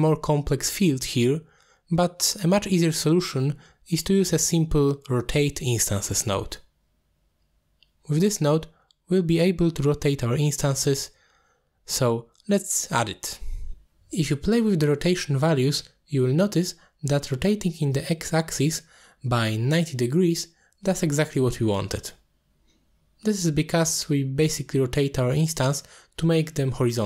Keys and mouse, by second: 0.4-1.0 drag, 2.0 click, 3.4 middle click, 4.0 shift+a, 10.1 click, 12.9 middle click, 15.7-19.3 drag, 19.4-21.0 drag, 21.7 middle drag, 22.5-23.0 middle drag, 23.3-27.0 middle drag.